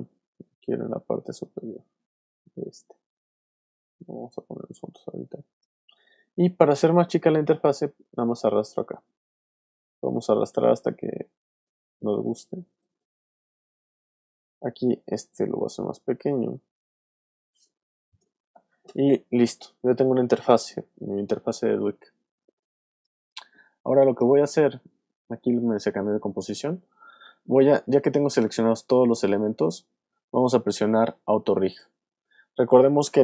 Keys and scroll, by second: 22.4 alt+space, 23.3 space.